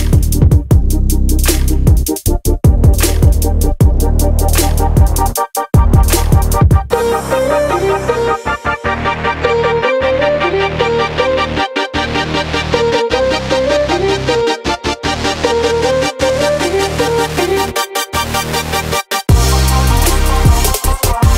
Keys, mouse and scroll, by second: 3.5-4.8 drag, 5.4 click, 6.3 click, 7.3 click, 9.3 click, 10.5 click, 11.0 click, 11.5-11.8 scroll down 2, 12.4-12.8 scroll up 1, 13.3 click, 14.0 click, 14.2-14.6 scroll down 1, 14.7-15.1 scroll up 1, 15.2-16.6 drag, 17.0 drag, 19.0-20.3 drag, 20.6-21.3 scroll down 4.